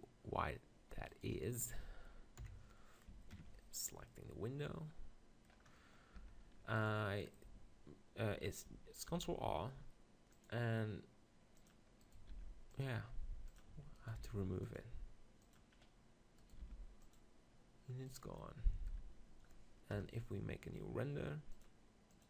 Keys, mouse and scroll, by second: 0.0 click, 1.1-2.6 right drag, 2.4 KP_7, 2.6 click, 3.3 ctrl+KP_7, 6.2 Tab, 7.2 right click, 8.0 click, 8.6 middle click, 9.1 ctrl+r, 11.7 click, 12.0 right click, 12.8 ctrl+r, 13.5 click, 14.2 ctrl+r, 15.4 click, 16.4-18.1 drag, 16.4-18.4 right drag, 16.6 ctrl+r, 18.2 click, 18.4-19.8 drag, 19.0 Tab, 20.0 KP_0.